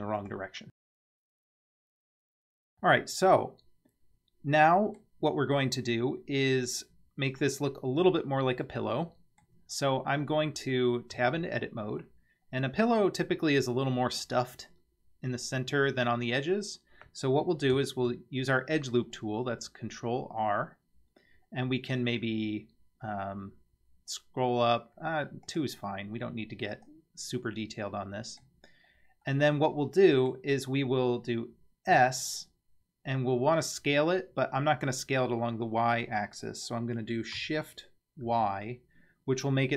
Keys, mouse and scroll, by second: 0.2-1.7 drag, 3.3-5.0 middle drag, 7.4-9.4 middle drag, 9.7-10.4 scroll up 2, 10.7 scroll down 1, 11.1 Tab, 12.0 scroll down 1, 12.0-13.0 middle drag, 13.1 scroll up 1, 16.9 scroll down 1, 17.9 ctrl+r, 27.4-28.4 middle drag, 28.7-29.2 scroll up 2, 29.3-30.3 middle drag, 31.9 s.